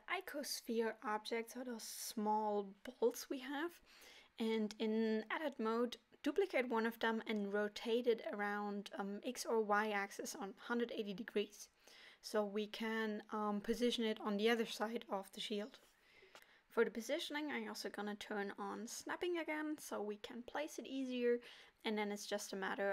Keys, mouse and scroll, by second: 0.8 click, 2.0 Tab, 3.7 l, 8.6 shift+d, 10.9 middle click, 13.3 r, 17.2 KP_1, 18.9 g, 20.9 middle click, 22.1 ctrl+KP_7.